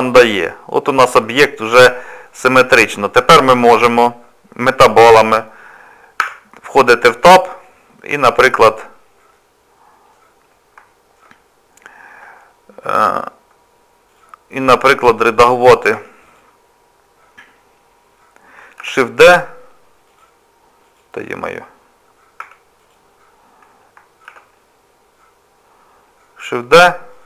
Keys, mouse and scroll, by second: 0.3 middle click, 3.1 click, 6.3 Tab, 7.1 click, 8.2 shift+middle click, 8.7-9.3 scroll up 1, 9.3 middle click, 10.5 scroll down 2, 10.9 shift+middle click, 14.1 click, 15.0 Tab, 15.3 click, 15.9 Tab, 16.3 click, 18.8 shift+d, 20.1 click, 20.8 click, 22.4 Tab, 22.8 click, 24.3 shift+d.